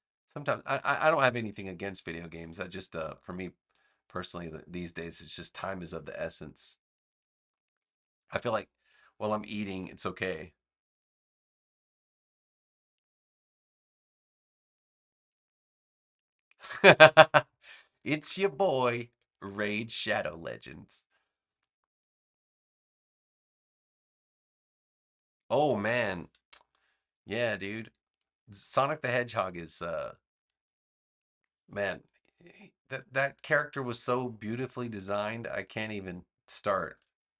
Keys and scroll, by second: 1.4 v, 36.8 v.